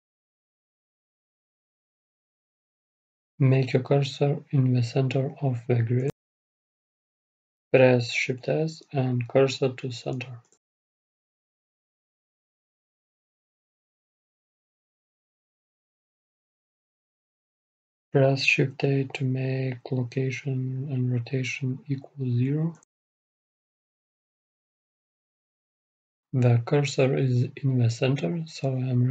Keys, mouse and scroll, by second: 0.0-1.9 drag, 1.9-3.2 middle drag, 3.2-5.1 drag, 4.8-9.4 middle drag, 18.9 shift+a, 20.2 ctrl+a, 23.9 ctrl+a, 26.6 click, 27.3-29.1 middle drag.